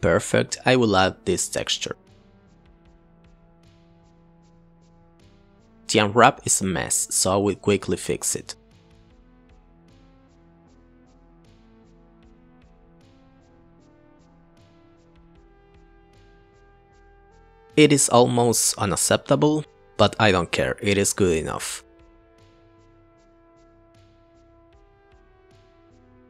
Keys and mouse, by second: 2.8 click, 3.3 click, 4.0 click, 6.6 click, 8.0 click, 8.9 ctrl+l, 9.5 shift+click, 10.1 ctrl+l, 11.9 click, 13.1-14.8 drag, 16.1 click, 16.7 click, 17.1 drag, 20.1 click, 21.0-21.7 drag, 22.0 click, 22.3 click, 22.7-23.0 drag, 25.3 click, 25.5 click, 25.9 shift+a.